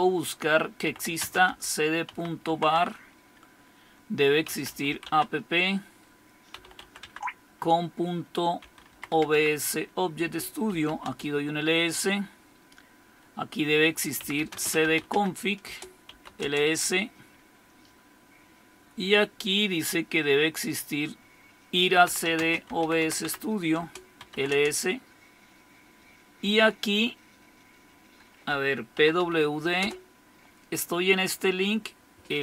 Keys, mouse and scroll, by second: 0.0-2.4 typing, 2.9 Tab, 4.2-5.0 typing, 6.3-11.4 typing, 14.2-16.9 typing, 15.6 Return, 21.8-24.6 typing, 23.8 Return, 28.2-29.7 typing, 29.8 Return.